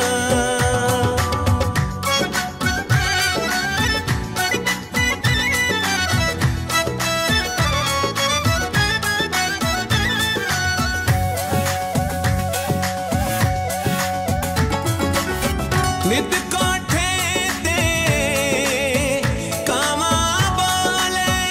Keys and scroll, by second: 4.7 Up, 6.3 Right, 15.3 Left.